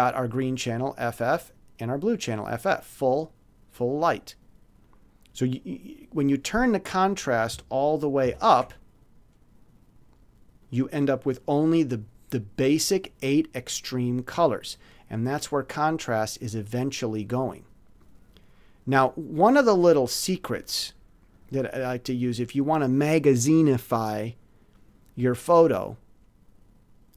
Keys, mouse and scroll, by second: 1.0-2.6 drag, 2.8 click, 4.8 middle click, 8.2 ctrl+z, 10.6 click, 10.7 middle click, 12.3 click, 14.2 click, 15.2 click, 16.3 middle click, 17.2 middle click, 17.9 click, 19.6 click, 21.3 click.